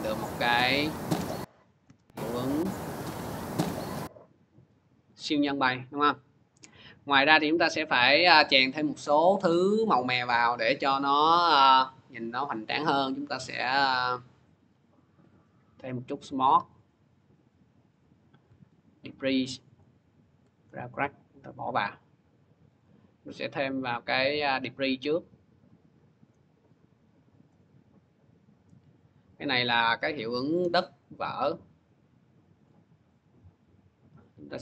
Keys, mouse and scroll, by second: 0.0 click, 1.6 click, 3.6 click, 6.0 click, 7.4-8.8 drag, 9.3-10.8 scroll, 10.8 scroll, 14.8 click, 15.5-15.9 scroll, 17.2 scroll, 19.0 ctrl+click, 19.7 scroll, 20.6 ctrl+click, 21.5 click, 22.6 scroll, 26.6 click, 27.2 click, 28.8-32.3 drag.